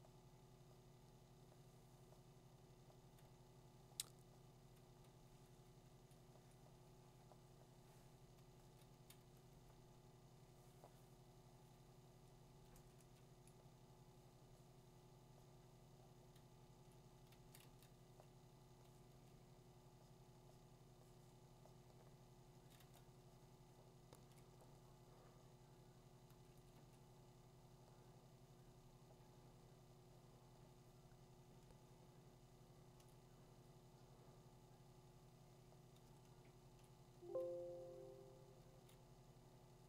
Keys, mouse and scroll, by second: 6.1 click, 8.9 typing, 12.4 ], 12.7 ], 13.0 ], 16.9 click, 17.3 2, 17.6 3, 19.1 2, 22.5 [, 22.8 [, 24.3 click, 26.5 2, 27.3-28.3 drag, 33.0-37.1 drag, 37.1 [, 38.6 [.